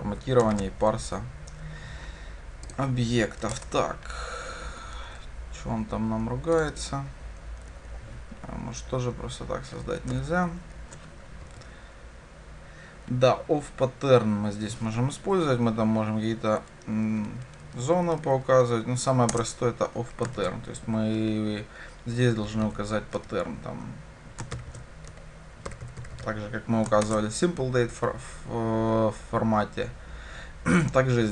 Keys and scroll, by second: 3.6 alt+Return, 7.8 Delete, 19.3 Return, 27.1 shift+Return.